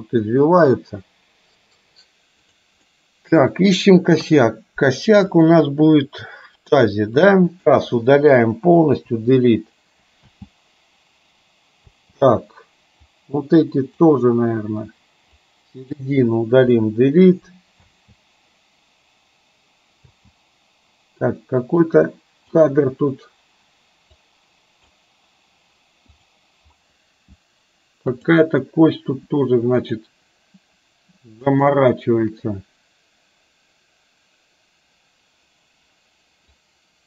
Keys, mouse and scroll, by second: 3.0-3.4 middle drag, 4.3 KP_3, 7.4 click, 9.1 Delete, 10.4 space, 11.9 space, 13.0-14.3 drag, 15.5-16.0 drag, 16.8 Delete, 17.9 space, 20.0 space, 22.0-22.6 drag, 24.3-25.0 drag, 26.3 click, 28.1 click, 29.8 click, 31.5 shift+click, 36.5-37.0 drag.